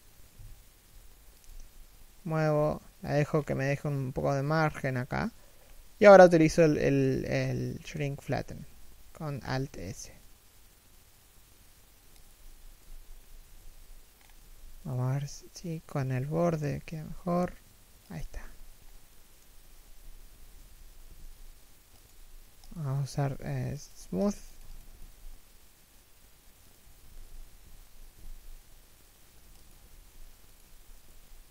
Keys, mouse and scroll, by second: 2.9-3.7 scroll up 1, 5.2-5.6 scroll down 1, 5.6 shift+middle click, 6.1-6.4 scroll down 1, 6.4 shift+middle click, 6.9-7.6 scroll up 1, 7.6 shift+middle click, 9.4 alt+s, 12.4 z, 12.8 scroll down 1, 13.3 z, 13.8 scroll up 1, 14.0 a, 14.4 alt+right click, 16.1-16.4 scroll down 1, 16.4 alt+s, 17.8 z, 18.4-18.7 scroll down 1, 18.7 middle click, 19.4 3, 19.8 1, 20.8 alt+s, 21.7 w, 24.6 alt+s, 26.9 z, 27.4 alt+w, 27.9 alt+s, 30.2 Tab, 30.3 a, 30.6 right click, 30.7 g.